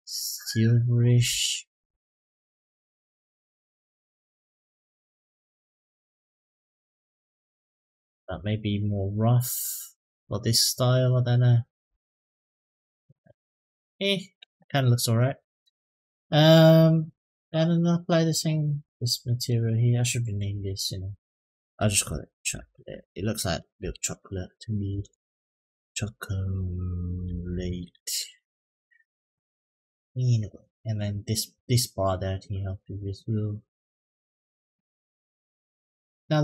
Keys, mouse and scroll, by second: 8.6-12.7 drag, 15.8 click, 18.3 click, 20.2-28.3 drag, 24.9 BackSpace, 25.3 BackSpace, 30.8 click, 31.3 click, 32.6-34.1 drag, 35.2 click, 35.6 click.